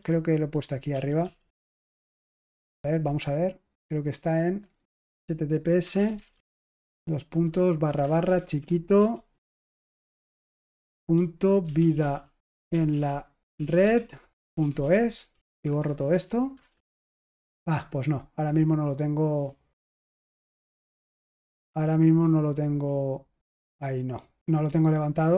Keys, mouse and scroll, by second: 0.8 ctrl+p, 1.1 ctrl+p, 1.5 ctrl+p, 4.2 click, 4.4 click, 5.5-15.2 typing, 15.3 Delete, 15.5 Delete, 15.6 Delete, 15.7 Delete, 16.5 Return, 20.1 click, 21.4-22.3 scroll down 1, 22.3 click, 24.9 click.